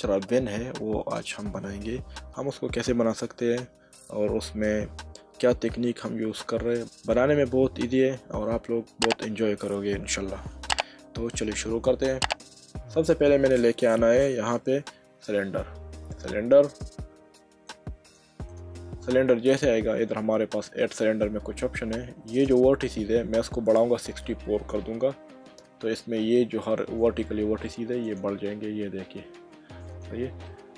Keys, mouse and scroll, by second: 1.8 middle click, 15.4 shift+a, 17.7 click, 20.8 click, 22.3 click, 24.5 6, 28.0 click, 29.9 click, 30.4 middle click.